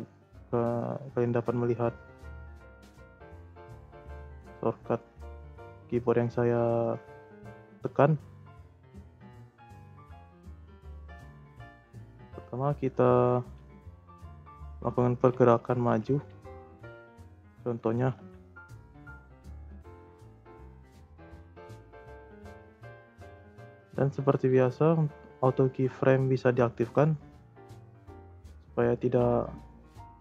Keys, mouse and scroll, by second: 0.0-3.9 drag, 4.2-5.6 drag, 5.6-6.0 scroll up 2, 6.0 middle click, 6.6 scroll down 2, 6.7-7.1 middle drag, 7.1-7.6 scroll up 4, 7.6 scroll down 1, 7.8 scroll up 1, 7.9 middle click, 8.7 scroll up 1, 9.0-9.4 middle drag, 9.4 Tab, 9.8 middle click, 10.0 Tab, 10.2 scroll down 3, 10.4 middle click, 10.8-11.1 scroll up 2, 11.1-12.2 middle drag, 12.2 g, 14.5-15.7 scroll up 1, 15.7 g, 17.4 scroll down 3, 17.7-18.0 shift+middle drag, 18.0 g, 20.1-20.8 drag, 20.8 space, 21.4 space, 22.1 click, 23.3 Delete, 23.9-27.0 drag, 28.9 g.